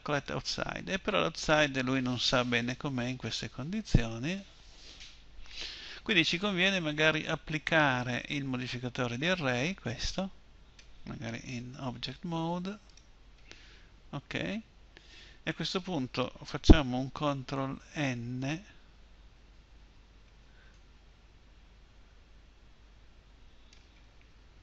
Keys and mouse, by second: 11.1 Tab, 13.5 Tab, 17.7 ctrl+n.